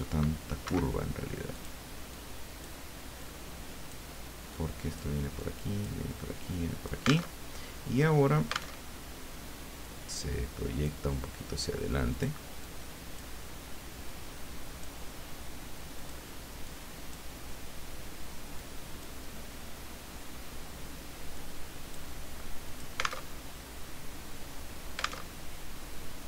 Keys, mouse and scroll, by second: 0.6 Escape, 1.5 click, 2.3 click, 3.2-4.3 drag, 4.6-6.1 drag, 6.4 click, 7.3 alt+Tab, 8.8 alt+Tab, 9.9-11.1 drag, 12.1 click, 12.6 click, 14.1 click, 16.0 click, 16.7 click, 18.5 click, 21.4 click, 22.7 alt+click, 23.3 alt+Tab, 25.2 alt+Tab.